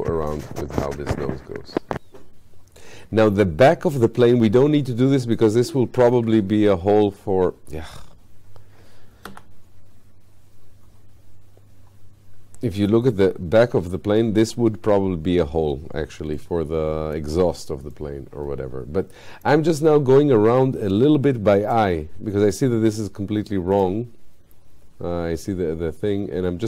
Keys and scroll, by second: 9.3 f.